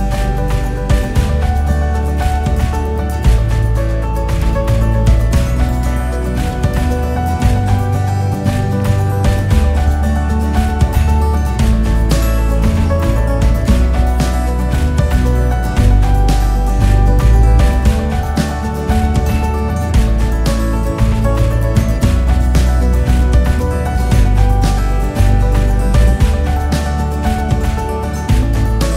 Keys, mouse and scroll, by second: 0.5 KP_4, 3.7 KP_1, 5.4 click, 7.9 r, 13.0 click, 13.7 shift+click, 15.1 r, 20.2 r, 25.5 g, 27.6 click, 28.2 KP_6, 28.2-28.9 KP_6.